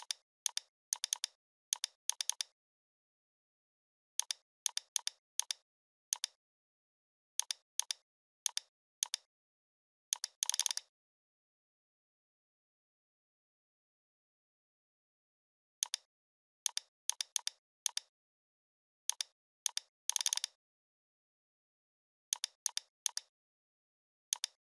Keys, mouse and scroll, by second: 3.6 Up, 3.8 Left, 4.2-5.3 drag, 7.1 ctrl+d, 7.4 click, 12.6-14.7 typing, 15.2 ctrl+Return, 15.8 click, 18.0-18.7 alt+click, 19.3-19.6 alt+click, 20.7-22.1 typing, 22.3 click, 23.1-23.9 alt+drag.